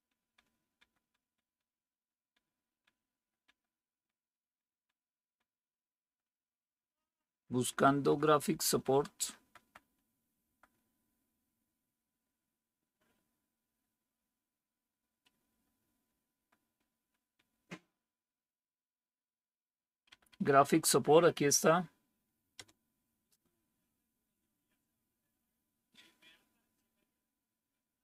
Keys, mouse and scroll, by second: 0.7 Down, 13.6 Down, 14.1 Down, 14.8 Down, 15.4 Down, 16.0 Down, 16.2 Down, 16.7 Down, 16.9 Down, 17.2 Down, 17.4 Down, 17.7 Down, 18.1 Down, 20.0 Up, 20.4 Up, 22.5 Return.